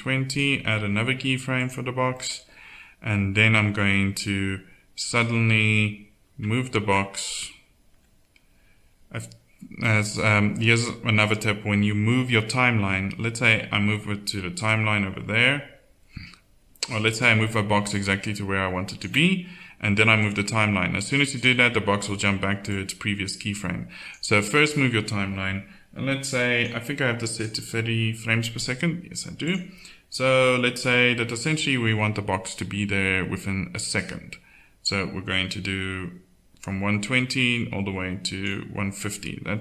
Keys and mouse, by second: 1.5 click, 2.1-4.4 middle drag, 13.5-16.0 drag, 18.0-20.2 drag, 31.0-32.5 drag.